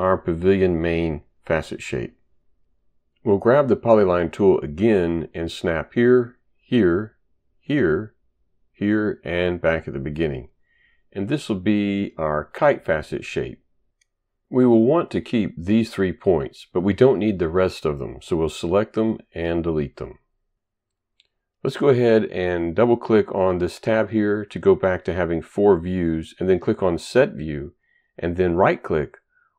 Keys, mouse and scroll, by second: 3.9 click, 5.3 click, 6.3 click, 7.6 click, 8.6 click, 9.7 click, 16.7 click, 19.1 Delete, 24.1 click, 26.2 click, 28.7 right click.